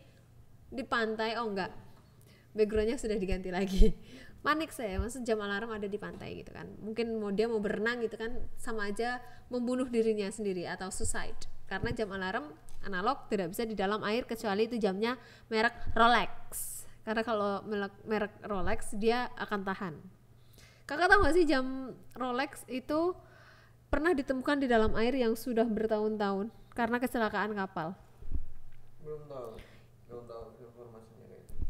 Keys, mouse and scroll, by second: 0.1 click, 0.6 click, 3.8-5.3 shift+drag, 10.8 click, 11.9 click, 14.7 click, 16.5 click, 21.4 click, 22.6 click, 24.1 n, 25.0 click, 25.3 click, 25.7 click, 26.0 shift+a, 27.1 click, 27.6 shift+a, 29.0 click, 29.5 click, 30.4 click.